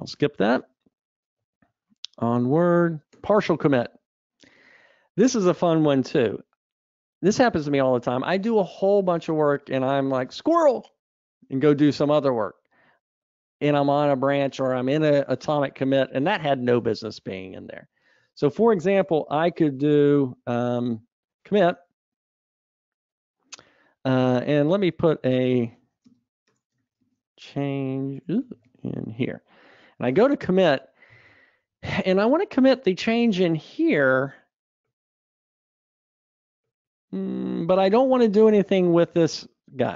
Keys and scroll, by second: 1.9 super+Up, 21.5 ctrl+v, 30.1 ctrl+v, 30.7 super+k.